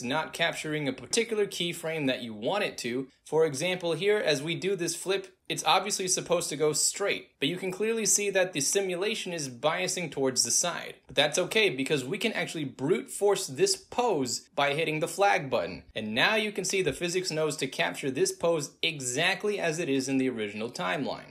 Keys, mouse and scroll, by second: 3.4 right click, 4.4 alt+drag, 5.2-6.2 drag, 14.1 click, 15.7-16.5 drag, 17.1 alt+click, 17.4-21.3 drag.